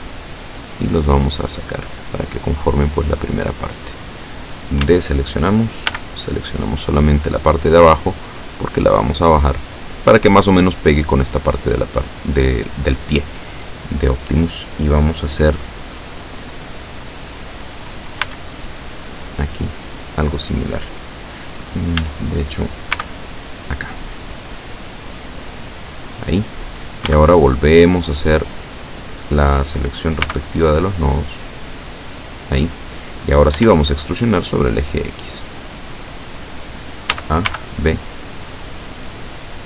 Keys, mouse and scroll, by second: 0.4-4.0 drag, 4.9 a, 6.0 b, 6.9 click, 8.1-10.0 drag, 18.3 b, 18.7 click, 22.1 a, 23.0 b, 23.2 click, 24.3-26.3 drag, 27.1 b, 27.6-28.9 drag, 30.3 b, 30.5-32.1 drag, 33.6 e, 36.1 click, 37.2 a, 37.5 b, 38.0 click, 39.2-39.6 drag.